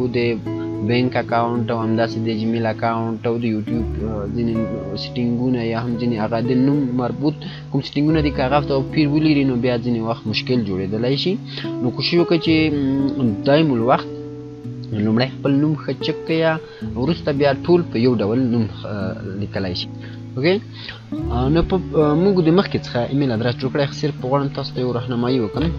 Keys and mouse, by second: 19.8 click, 20.2 F9.